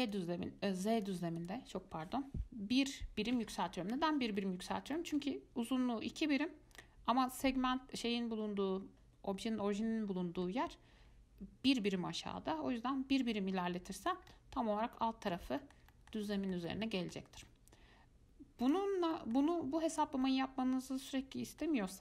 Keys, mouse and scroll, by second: 0.2-1.2 drag, 1.6-4.6 drag, 4.6-5.3 middle drag, 5.3-6.4 scroll down 1, 6.4-7.0 scroll down 1, 7.0-8.3 scroll down 1, 14.5-18.8 middle drag, 18.8-20.2 drag, 20.4-22.0 middle drag.